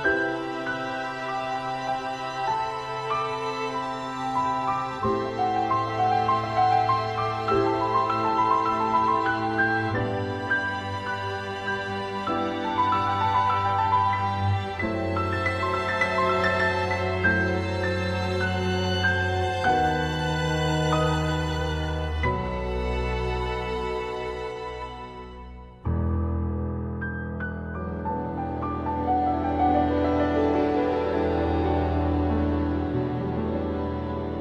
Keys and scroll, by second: 0.2 ctrl+z, 0.9 ctrl+z, 7.8 ctrl+z, 8.7 ctrl+z, 9.1 ctrl+z, 9.4 ctrl+z, 11.1 ctrl+z, 11.5 ctrl+z, 11.9 ctrl+z, 12.7 ctrl+z, 13.1 ctrl+z, 19.3 ctrl+z, 20.5 ctrl+z, 21.3 ctrl+z, 22.3 ctrl+z, 24.0 ctrl+z, 25.4 ctrl+z, 25.9 ctrl+z, 28.8 ctrl+z, 29.5 ctrl+z, 30.5 ctrl+z.